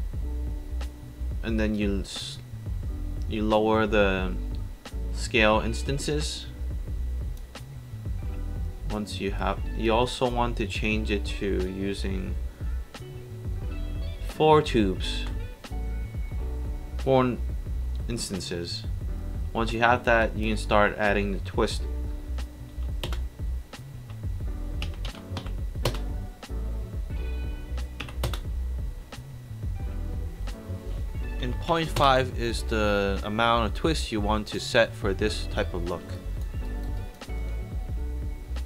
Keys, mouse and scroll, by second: 1.7-3.8 drag, 9.9 click, 14.7 KP_4, 15.2 Return, 20.2 click, 22.8 KP_2, 23.1 Return, 24.9 KP_1, 25.5 KP_5, 25.9 Return, 28.1 KP_1, 28.3 Return, 31.8 KP_5, 32.0 Return, 36.2 click, 36.7 alt+right drag, 37.0 alt+click.